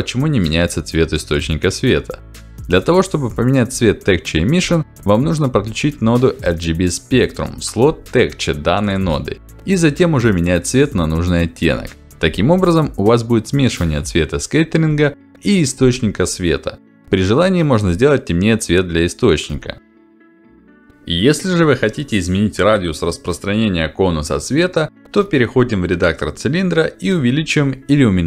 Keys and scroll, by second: 6.1 r, 6.3 g, 6.6 b, 20.9 Return.